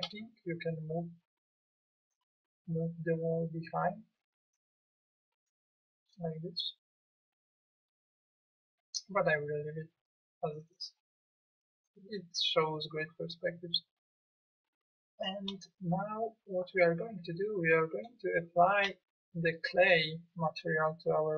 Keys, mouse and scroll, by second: 4.5 click, 16.5 middle click, 16.9-17.4 middle drag.